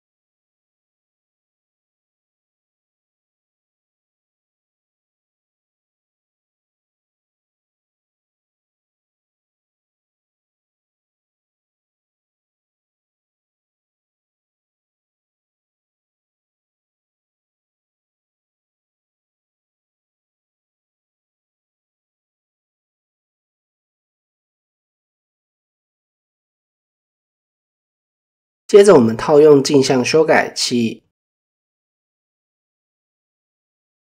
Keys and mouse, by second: 0.8 click, 5.7 g, 6.6 shift+middle click, 7.1 click, 8.6 click, 9.3 click, 10.0 click, 11.4 click, 16.8 click, 17.5 click, 19.5 shift+middle click, 20.3 click, 21.9 click, 23.3 g, 23.6 click, 25.6 Tab, 27.7-28.1 shift+middle drag, 29.0-30.2 drag, 31.3 Tab, 33.0 shift+middle drag.